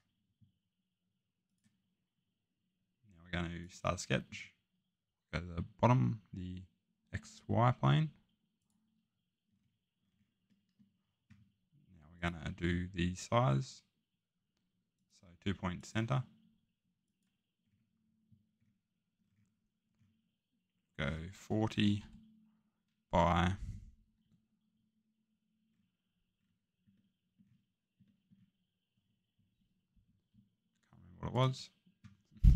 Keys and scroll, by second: 21.7 typing, 24.2 Tab.